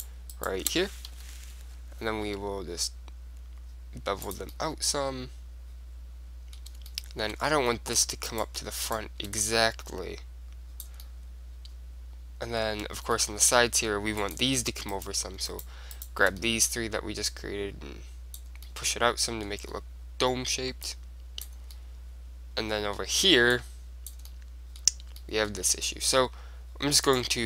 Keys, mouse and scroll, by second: 1.3 KP_3, 2.4 g, 4.5 click, 4.7-6.5 middle drag, 7.0-8.4 middle drag, 8.4-10.9 right drag, 9.6-11.5 drag, 11.7 middle click, 12.6 middle click, 13.3-14.3 middle drag, 14.3 click, 15.1 right click, 15.2 middle click, 16.1 right click, 16.5-18.2 middle drag, 17.4 click, 17.4 right click, 18.2 click, 18.8 middle click, 19.0 click, 19.4-21.0 middle drag, 21.0-22.8 drag, 21.6-23.6 middle drag, 23.8-25.6 drag, 24.4 middle click, 24.8 right click, 25.6 middle click, 26.9-27.4 middle drag, 27.2 click.